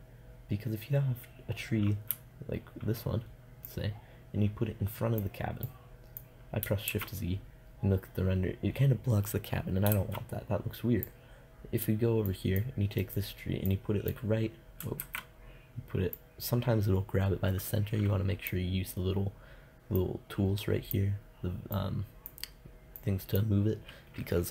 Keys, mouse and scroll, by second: 3.9-5.4 drag, 7.1 shift+z, 10.1 shift+z, 15.2 ctrl+z, 20.1-21.3 drag.